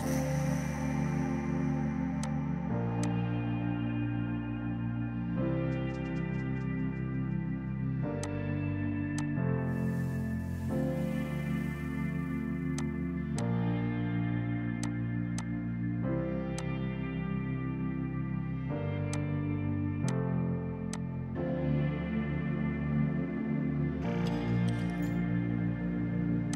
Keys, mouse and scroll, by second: 2.3 click, 8.3 click, 12.8 click, 18.5 space, 19.2 click, 23.0-25.0 typing.